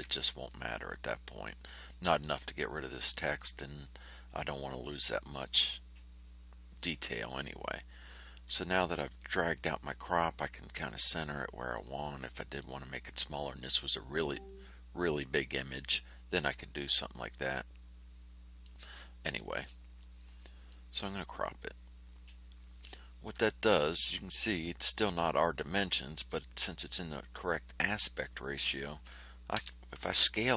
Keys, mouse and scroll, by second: 8.8-11.9 drag, 12.5-18.8 drag, 19.6-20.8 drag, 20.9 click, 29.5 s.